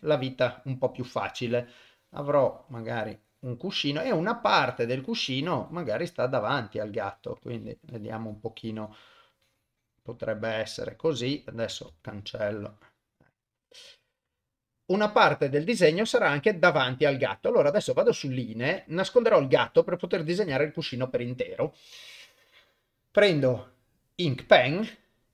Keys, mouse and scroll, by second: 12.0-14.2 ctrl+drag, 17.8 click, 18.8 ctrl+middle click, 19.7 click, 20.6 shift+middle click, 23.3-24.3 drag.